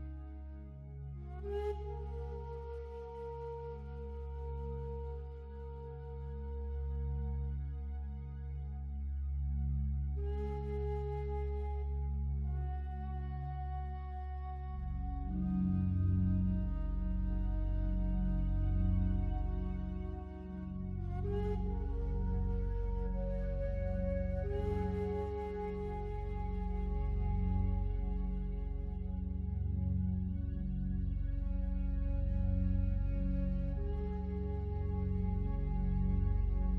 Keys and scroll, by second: 31.7 ctrl+z.